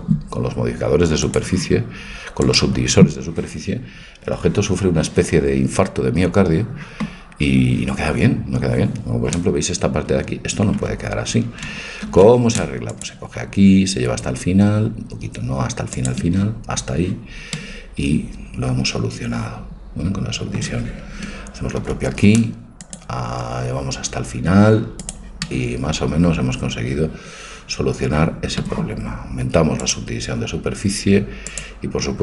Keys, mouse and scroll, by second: 2.8-8.2 drag, 8.2-10.8 middle drag, 10.8 Tab, 12.2 ctrl+r, 17.6-19.5 middle drag, 21.8 ctrl+r, 25.5-27.3 middle drag, 29.9-32.2 drag.